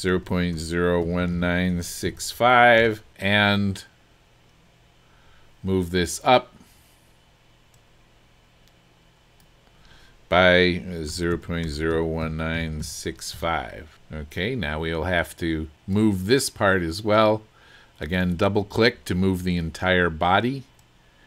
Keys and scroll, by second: 0.0-2.1 typing, 2.8 Return, 11.1-13.1 typing, 13.3 Return.